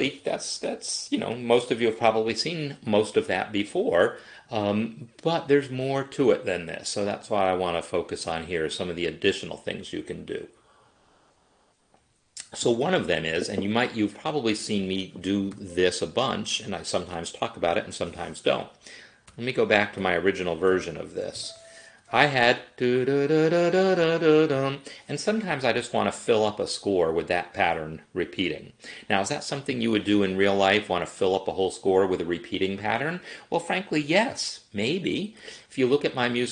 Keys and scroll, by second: 15.6 5, 19.4-21.4 typing, 21.9 Escape.